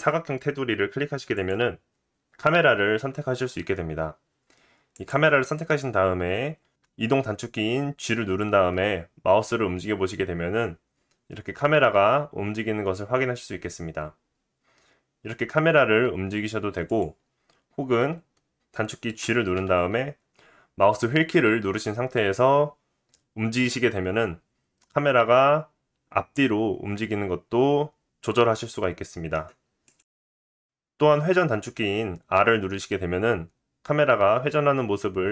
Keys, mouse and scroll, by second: 1.3 click, 4.9 click, 8.0 g, 19.2 g, 24.9-35.3 middle drag, 32.4 r.